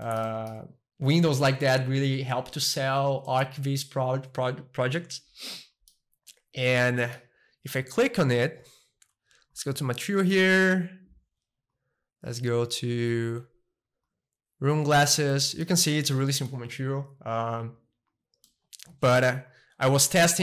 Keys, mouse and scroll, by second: 3.2-5.3 middle drag, 7.0-8.0 middle drag, 11.7-13.7 drag, 14.0 click, 15.3 middle click, 16.1-17.9 middle drag, 18.4-20.4 middle drag.